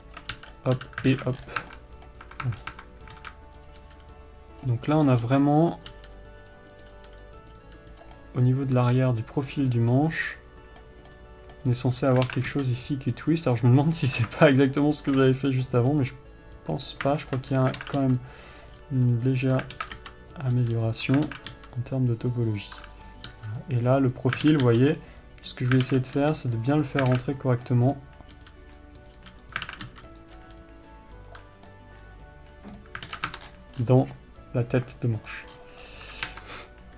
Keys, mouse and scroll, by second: 0.1 click, 0.5 shift+click, 0.7 f, 1.5 alt+a, 1.7 scroll down 1, 2.0 Tab, 2.1-4.0 middle drag, 2.6 Tab, 3.0 scroll up 1, 3.1 Tab, 3.5 alt+a, 4.0 click, 4.2 g, 5.3 click, 5.6 g, 6.0 click, 6.3 g, 6.9 click, 7.3 g, 7.6 click, 7.9 g, 8.4 click, 8.6-12.5 middle drag, 12.5 click, 12.6 alt+a, 13.8 b, 14.8 shift+click, 15.6-19.7 middle drag, 16.3 g, 17.9 scroll up 1, 18.1 alt+a, 19.0 b, 19.7 click, 20.1 alt+a, 20.7 b, 21.6 alt+a, 22.7 b, 23.4 click, 23.7 g, 24.8 alt+a, 25.8 b, 26.2 alt+a, 27.0 b, 27.5 alt+a, 27.6 middle click, 28.3 click, 28.7 g, 29.5 click, 29.5 g, 30.0 alt+a, 30.6 b, 31.9 scroll down 1, 32.0-36.9 middle drag, 33.4 alt+a, 33.5-34.1 ctrl+scroll down 2, 33.7 Tab, 35.9-36.2 scroll up 1, 36.6 Tab.